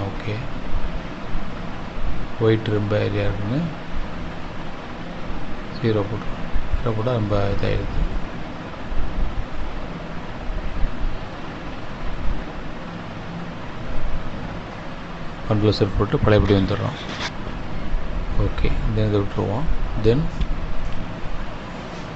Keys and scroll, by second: 18.6 ctrl+z.